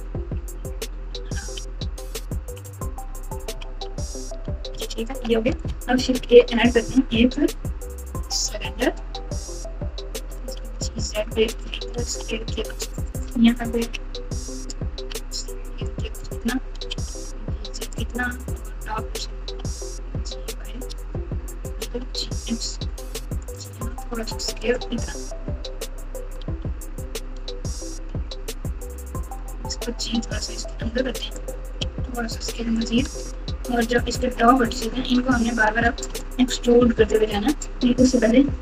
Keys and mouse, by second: 0.1-2.4 typing, 2.6 KP_Add, 3.0 KP_Add, 3.5 KP_6, 3.7 KP_8, 4.7 ctrl+KP_8, 5.1 ctrl+KP_8, 5.2 ctrl+KP_8, 6.1 shift+a, 10.4 g, 11.9 s, 13.7 KP_1, 14.9 s, 16.9 g, 18.4 KP_7, 19.4 g, 21.9 g, 23.4 x, 23.7 s, 25.2 KP_1, 26.4 r, 28.4 g, 29.4 g, 31.9 s, 33.0 Tab, 34.0 alt+z, 34.7 click, 34.9 click, 35.8 alt+z, 38.0-38.6 typing.